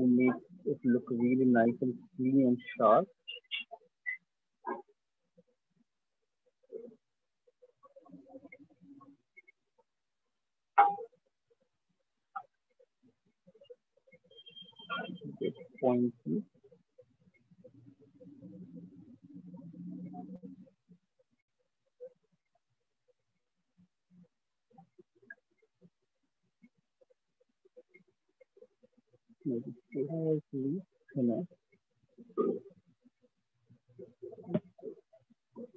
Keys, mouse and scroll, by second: 3.2 click, 6.3 click, 8.4 click, 9.1 ctrl+z, 10.8 click, 12.1 click, 13.3 click, 14.7 click, 18.2 ctrl+click, 18.3 ctrl+click, 19.9 click, 21.5 ctrl+click, 23.1 shift+click, 24.7 right click, 27.1 click, 28.7 right click, 30.4 alt+click, 31.1 click, 33.7 click, 34.0 alt+click, 34.3 ctrl+z.